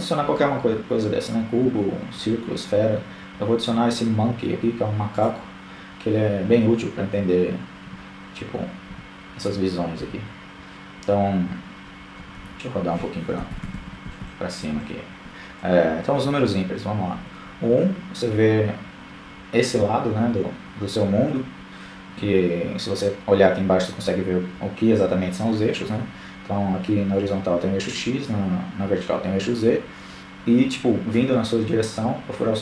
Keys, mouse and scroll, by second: 4.8 KP_1, 5.9 KP_3, 6.8 KP_4, 9.1 KP_2, 9.3 KP_2, 10.4-11.1 KP_8, 11.6 KP_8, 14.1 KP_1.